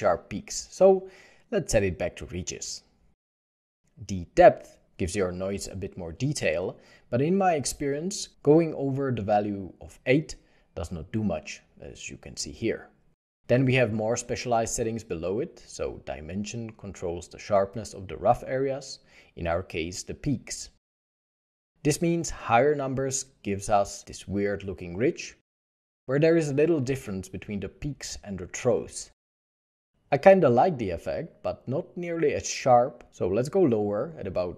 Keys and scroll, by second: 9.1 1, 9.4 Return, 9.4 6, 12.9 1, 13.1 Return, 13.1 0, 16.0 Return, 16.0 2, 19.0 2, 29.2 1, 29.5 5, 29.5 ., 29.7 Return, 34.0 2, 34.1 Return.